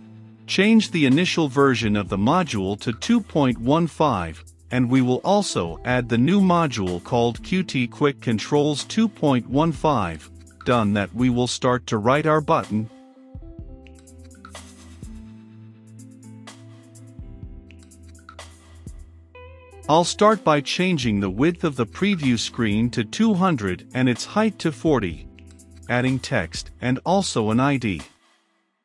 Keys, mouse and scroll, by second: 12.5 shift+b, 12.7 u, 12.9 t, 13.5 Return, 14.1 shift+], 14.4 Return, 17.0 click, 25.7 Return, 25.7-28.6 typing, 26.2 ctrl+space, 26.4 Return, 27.3 Return.